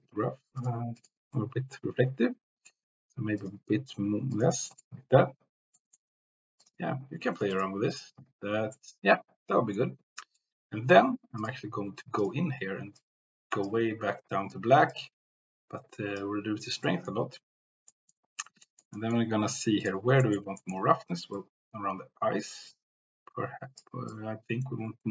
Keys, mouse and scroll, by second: 0.5 click, 1.4-2.7 middle drag, 5.1 click, 5.7 middle click, 6.6 click, 7.9 click, 8.8 middle click, 10.3 middle click, 11.4 click, 12.1 click, 14.9-16.1 drag, 16.7 middle click, 17.9 middle click, 18.7 shift+middle click, 19.1 middle click, 19.8 click, 20.2 middle click, 20.7 shift+middle click, 21.3-23.8 drag, 24.3-25.1 drag.